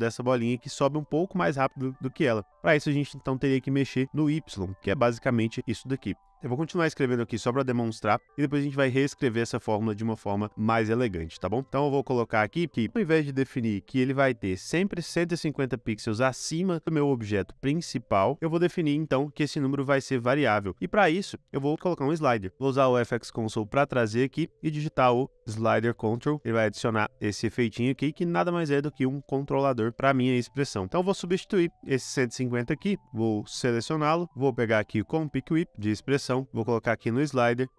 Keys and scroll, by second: 23.3 ctrl+space, 24.3-25.7 typing, 26.1 Return.